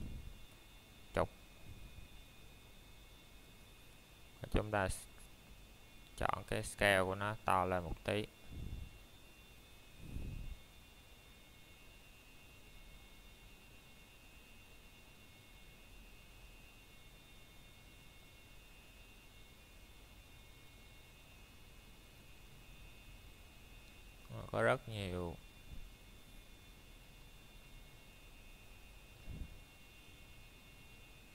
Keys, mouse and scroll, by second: 2.4 click, 13.2 click, 15.3 middle click, 16.7 scroll up 1, 18.4 middle click, 19.2 shift+middle click, 20.0 scroll down 1, 20.6 middle click, 25.6 click.